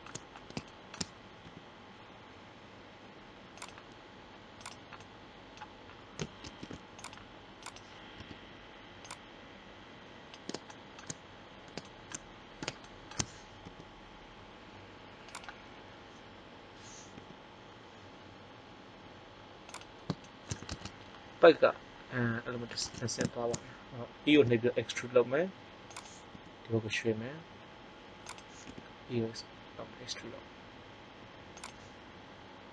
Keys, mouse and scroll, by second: 1.3 g, 5.0 middle click, 6.4 ctrl+Tab, 8.1 KP_1, 13.6 g, 17.1 g, 19.9 click, 24.3 e, 26.0-27.6 drag, 26.3 g, 28.6 e, 31.8-32.7 drag.